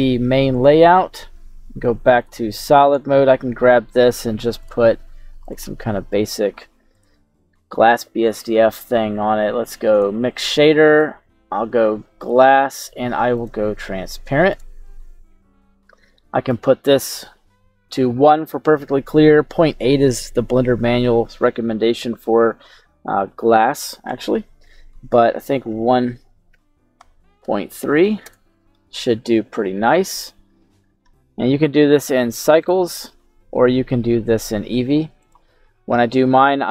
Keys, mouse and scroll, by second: 0.6 middle click, 0.6 scroll down 1, 2.2 click, 2.9 right click, 4.6 click, 5.4 click, 6.9-10.0 drag, 10.9-12.3 drag, 13.3-14.9 drag, 15.3-16.4 scroll down 1, 18.4-28.3 drag, 28.0 KP_3, 30.1-31.0 scroll up 5, 31.0 middle click, 32.7 click, 33.9-34.9 scroll down 2, 34.9-35.2 scroll down 1, 35.2 click.